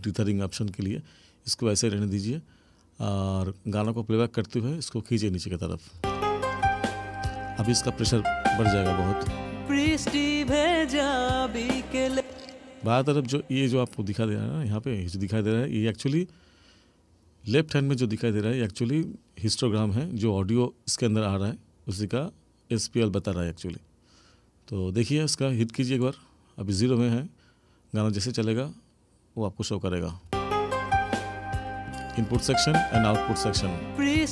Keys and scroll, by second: 6.0 space, 12.1 space, 30.3 space.